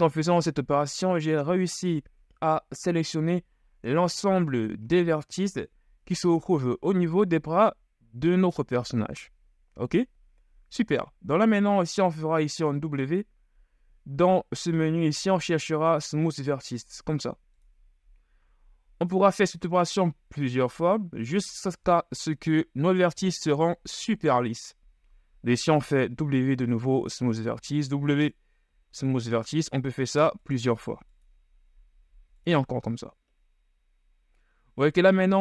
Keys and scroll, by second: 12.2 KP_1, 12.9 w, 26.5 w, 29.4 w, 30.1 w, 30.8 w, 35.3 Tab.